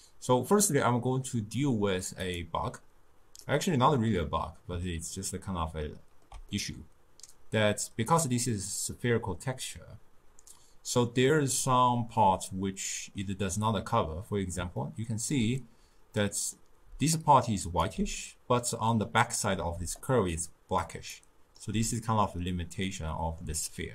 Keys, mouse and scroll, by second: 3.5-9.6 middle drag, 12.2-16.9 middle drag, 16.9 d, 17.2 click, 17.9 d, 18.2-19.8 middle drag, 19.8 d, 20.0 click, 20.8 d, 21.0 d, 21.2 right click, 21.7 d, 22.9 d, 22.9-23.9 middle drag.